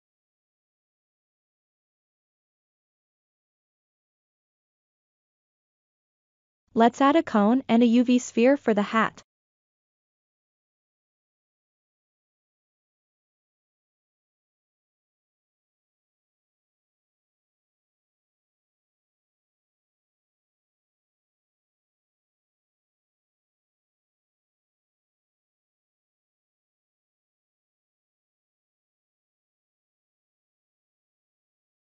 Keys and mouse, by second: 0.0 shift+middle click, 0.1 ctrl+middle click, 3.0 shift+a, 3.8 click, 4.1 Tab, 4.7 shift+a, 10.0-13.6 right drag, 16.6 click, 17.7-18.9 drag, 19.9 click, 23.7 KP_3, 25.8 Tab, 28.0 r, 28.9-30.3 drag, 30.4 s, 31.7-31.9 drag.